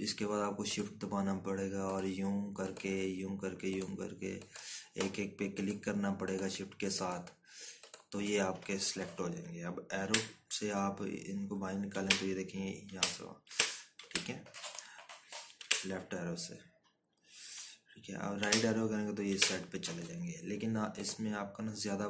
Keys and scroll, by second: 14.1 Left, 15.6 Right, 16.2 Left, 17.1 Right, 17.7 Left, 18.2 Right, 19.8 Left, 21.7 Right.